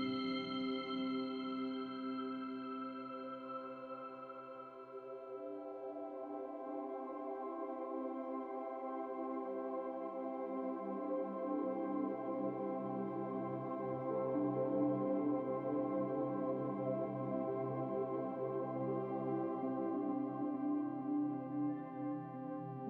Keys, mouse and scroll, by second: 9.4 scroll up 2, 10.1 click, 10.7-11.3 scroll up 2, 11.3 click, 12.5-14.0 drag, 14.0 scroll up 2, 14.2-14.6 middle drag, 14.6 Tab, 15.6 a, 16.2 a, 17.7 click, 18.4 Tab, 19.6-21.3 drag, 21.3-21.6 scroll up 4, 21.6 Tab, 22.3 Tab, 22.6 scroll down 3.